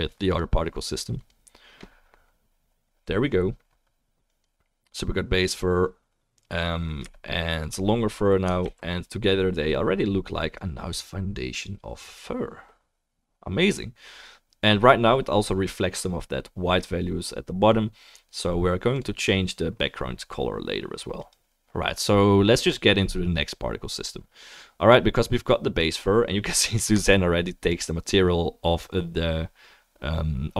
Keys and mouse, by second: 0.3 click, 0.3 middle click, 8.7 ctrl+s, 18.9 click, 18.9 middle click, 21.2 click, 22.3-27.8 middle drag, 24.1-27.0 drag, 27.7 click.